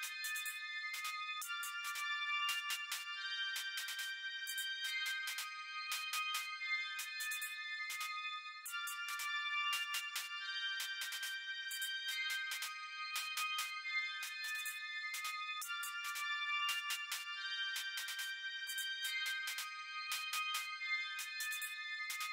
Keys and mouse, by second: 9.0 click, 10.4 click, 22.1 click.